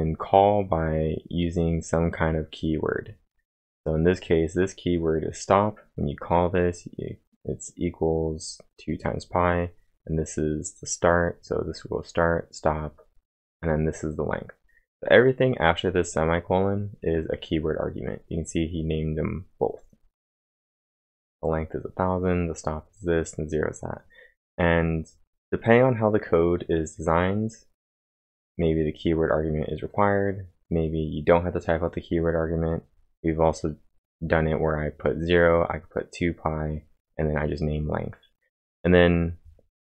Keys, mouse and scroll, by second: 23.6-24.3 typing, 23.8 click, 24.9 click.